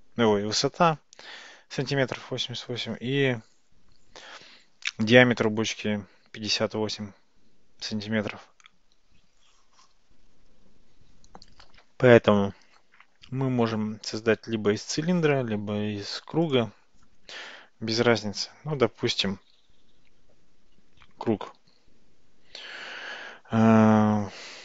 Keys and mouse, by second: 21.7 Tab, 23.6 Tab.